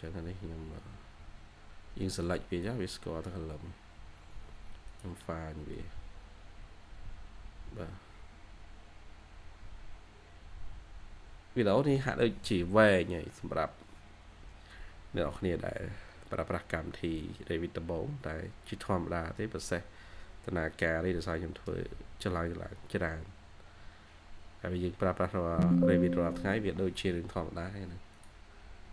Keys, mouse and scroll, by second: 1.7 scroll down 1, 1.9 middle click.